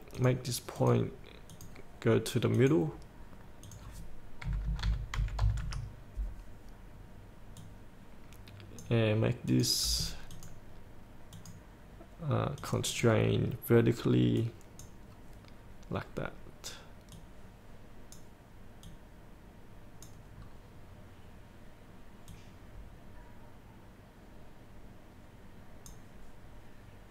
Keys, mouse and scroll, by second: 4.6 KP_8, 5.3 KP_Decimal, 5.6 KP_5, 7.8-12.5 drag, 13.9-14.6 scroll down 1, 14.6-20.5 drag, 20.6-21.2 scroll down 1, 22.5-27.1 drag.